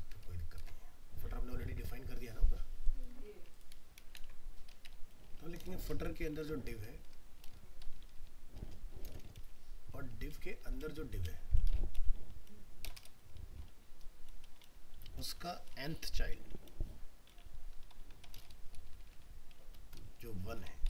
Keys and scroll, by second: 3.4 ctrl+c, 4.1 ctrl+v.